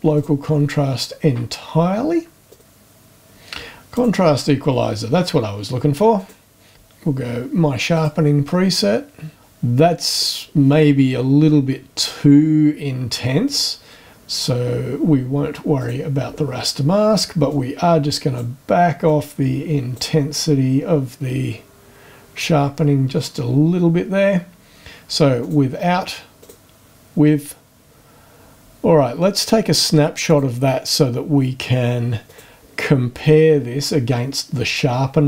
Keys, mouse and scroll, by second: 0.1 click, 2.5 click, 3.9 click, 6.1 click, 7.9 click, 13.4 click, 15.8 click, 17.5-18.5 drag, 19.0-20.2 drag, 25.4 click, 26.4 click, 30.3 click, 32.3 click, 33.5 scroll up 1.